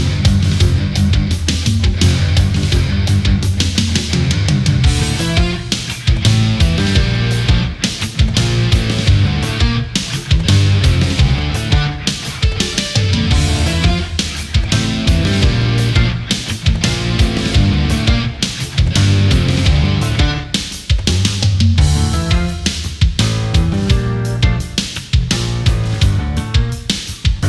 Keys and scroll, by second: 0.3 ctrl+-, 0.9 ctrl+-, 1.1 space, 1.8 ctrl+z, 3.7 ctrl+=, 5.5 space, 7.6 space, 11.1 ctrl+-, 11.6 space, 12.4 space, 13.2 ctrl+z, 13.3 space, 13.8 ctrl+-, 14.1 space, 23.5 ctrl+=, 23.8 space.